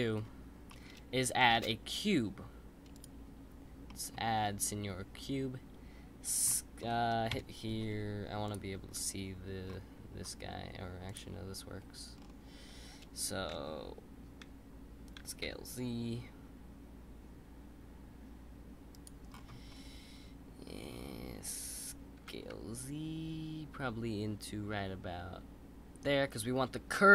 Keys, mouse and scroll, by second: 0.7-1.5 middle drag, 1.5 shift+a, 3.8-4.5 middle drag, 4.5 click, 6.4-7.3 middle drag, 7.3 KP_1, 8.4-9.6 drag, 9.6-10.7 scroll up 3, 11.0 click, 11.7-12.1 scroll up 1, 12.1-12.6 scroll down 4, 12.6-15.1 scroll up 1, 15.1 s, 19.3-20.6 scroll up 7, 20.6-21.3 scroll up 2, 22.2 s.